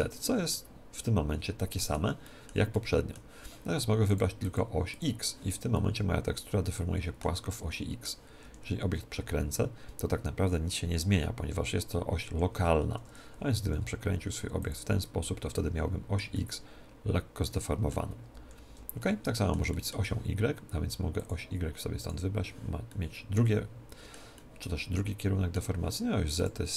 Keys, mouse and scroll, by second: 0.5-4.5 middle drag, 4.0-6.3 drag, 5.7-9.2 middle drag, 8.4 r, 11.5-12.9 middle drag, 12.9 Tab, 13.6 r, 14.7-16.5 drag, 14.9 Tab, 15.6-18.1 middle drag, 18.3 ctrl+z, 18.9-21.1 middle drag, 21.1-23.1 drag, 22.8-26.1 middle drag, 26.3-26.7 drag.